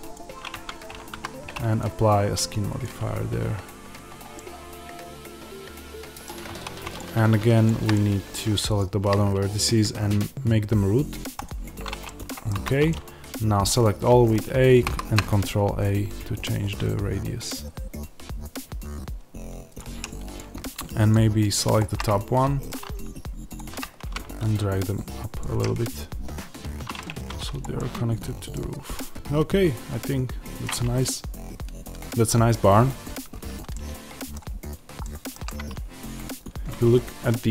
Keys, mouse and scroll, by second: 0.4 Tab, 1.0 a, 2.7-4.3 drag, 4.3-6.9 middle drag, 6.4 1, 6.9 click, 7.8 middle click, 8.7 shift+click, 11.3 click, 11.9-19.7 middle drag, 12.4 a, 14.8 ctrl+a, 19.7 click, 21.9-23.4 middle drag, 23.4 shift+click, 23.9 g, 25.3 click, 25.5-27.5 middle drag, 27.0 Tab, 27.5 click, 27.6-37.5 middle drag, 28.4-28.9 scroll down 1.